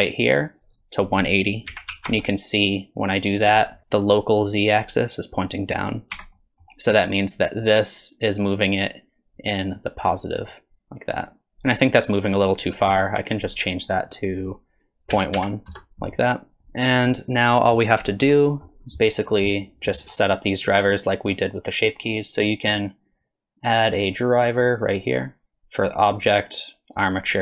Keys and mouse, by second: 1.1-3.8 drag, 6.1 Tab, 6.3 middle click, 7.4-13.0 drag, 14.0-16.1 drag, 16.6 click, 17.1-17.7 middle drag, 18.1 shift+click, 18.4 click, 22.4-27.4 right drag.